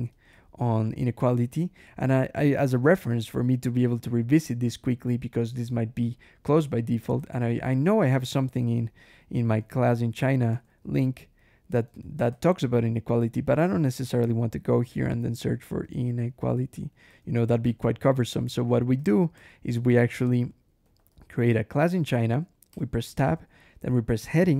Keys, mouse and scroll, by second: 0.0-1.1 typing, 0.2 shift+Escape, 5.9 click, 6.6 click, 7.0 Escape, 7.2-10.9 typing, 10.1 Return, 10.4 Escape, 11.9 alt+Return, 12.1 alt+Escape, 13.6 ctrl+f, 14.8-16.6 typing, 16.8 Return, 16.9 Escape, 17.3 alt+h, 17.5 alt+Escape, 18.0 alt+k, 18.2 alt+j, 18.8 alt+d, 19.2 alt+Escape, 19.6 alt+i, 20.0 alt+[, 20.7 alt+c, 20.8 alt+l, 20.9 alt+a, 21.1 alt+s, 22.6 Tab, 24.0 shift+3.